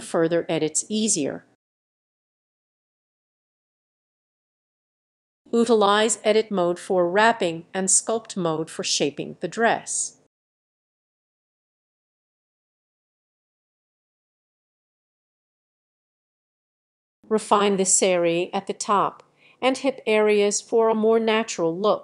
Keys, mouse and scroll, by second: 0.1 click, 1.0-3.5 drag, 3.5 middle click, 3.8-5.3 drag, 5.6 click, 7.8 click, 8.6 middle click, 9.9-11.3 drag, 11.3-12.5 middle drag, 12.5-14.1 drag, 14.1-14.7 scroll down 9, 14.7 click, 14.8 middle click, 15.2 click, 15.4 s, 15.5 click, 15.8 x, 15.9-17.3 drag, 17.3-17.8 scroll down 2, 17.9 click, 18.0 scroll up 1, 18.2 click, 18.5 scroll up 1, 18.7-20.7 drag, 20.7 middle click, 20.8 s, 21.0 click, 21.0 middle click, 21.2 click, 21.6 ctrl+z, 21.7 ctrl+z, 21.9 click.